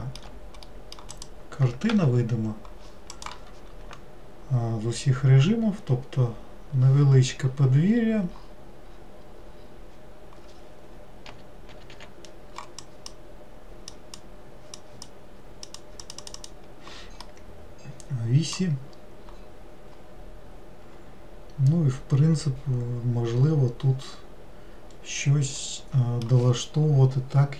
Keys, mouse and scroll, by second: 1.3 click, 7.7 scroll down 2, 8.6-9.1 scroll down 1, 9.1-9.9 scroll up 7, 13.0 drag, 14.1 drag, 14.9 drag, 15.8 click, 16.2 click, 16.3 click, 16.5 click, 17.4-19.1 middle drag, 19.1-20.0 scroll up 4, 20.0-23.1 scroll up 1, 25.8-27.5 middle drag.